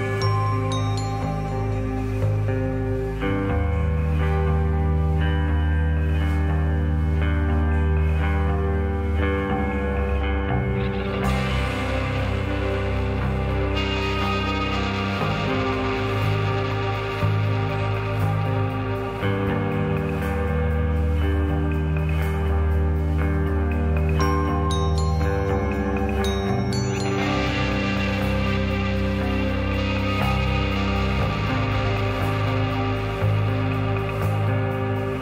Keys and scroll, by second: 8.6 Down, 16.8 u, 19.5 Page_Down.